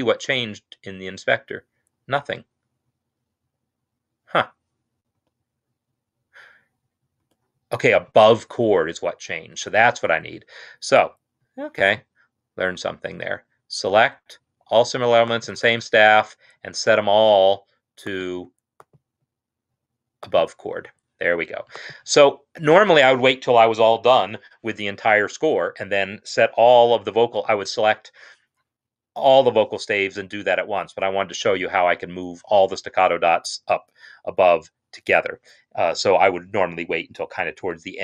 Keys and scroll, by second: 5.1 x, 7.1 typing.